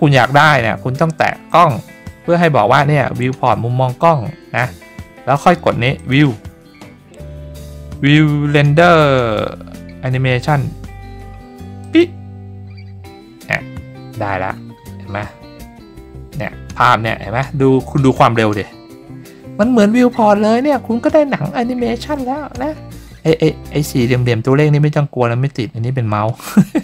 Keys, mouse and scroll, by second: 1.5 click, 5.9 click, 11.8 click.